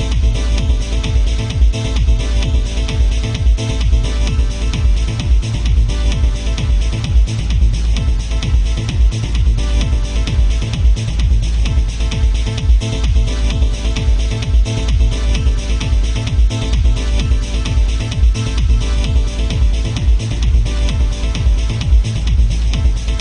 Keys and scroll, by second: 2.7 ctrl+z, 7.7 ctrl+z, 12.7 alt+space, 13.8 ctrl+z, 22.8 ctrl+z.